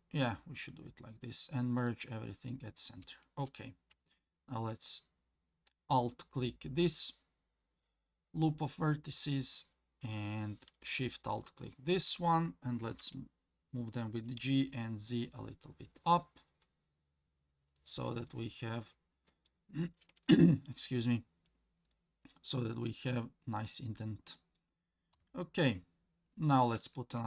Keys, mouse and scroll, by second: 4.3 alt+click, 11.4 alt+shift+click, 13.0 g, 18.3-19.5 middle drag, 21.5-24.6 middle drag, 25.1 KP_1, 25.8-26.7 scroll up 2, 26.8 shift+middle click.